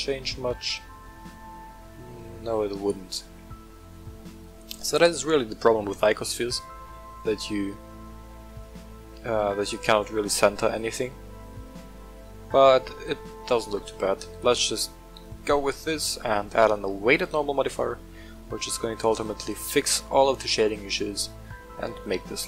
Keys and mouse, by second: 2.8 right click, 3.3-5.0 middle drag, 6.2 r, 6.4 z, 9.6 right click, 10.1-10.7 middle drag, 11.6-13.2 middle drag, 15.2-17.2 drag, 17.8 middle click, 19.1 click, 19.5 click, 19.9 click, 20.6 click, 20.8 click, 21.6-22.4 middle drag.